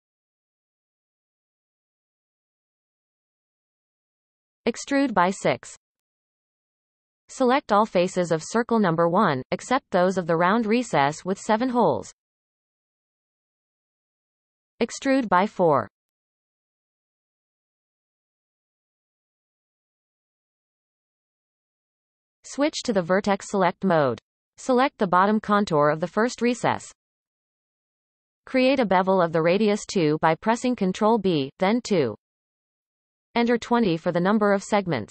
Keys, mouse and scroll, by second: 5.2 e, 8.8 click, 9.6-11.3 shift+drag, 14.9 e, 19.1 scroll down 1, 20.6 scroll down 1, 20.7-22.4 middle drag, 22.4 click, 22.8 scroll up 1, 23.9 alt+a, 24.8 alt+shift+click, 25.3-27.7 middle drag, 27.7 ctrl+b, 33.4-35.1 drag.